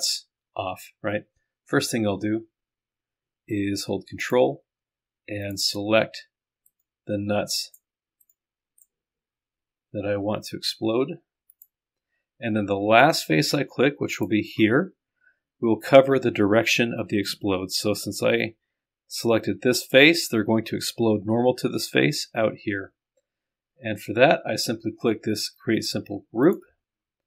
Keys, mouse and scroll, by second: 4.3 ctrl+click, 5.5 ctrl+click, 6.7 middle click, 9.8 middle click, 26.5 click.